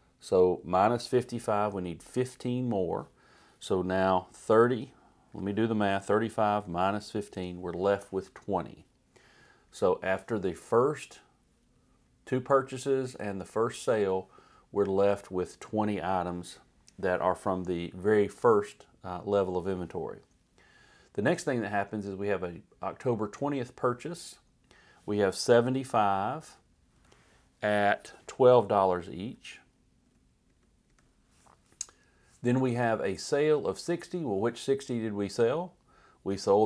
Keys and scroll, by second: 5.3-7.6 typing, 25.3-26.2 typing, 26.5 Right, 29.3 2, 30.0 Down, 30.5 Left.